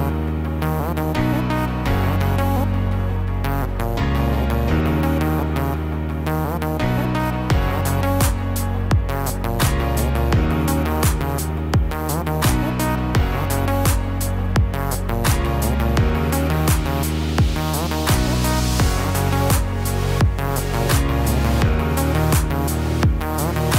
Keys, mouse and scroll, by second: 3.0-3.9 scroll down 1, 3.9 middle click, 3.9 scroll down 1, 6.4 click, 6.8 click, 11.3 click, 12.6 g, 15.1 middle click, 16.6 click, 17.6 g, 20.3 click, 21.2 g.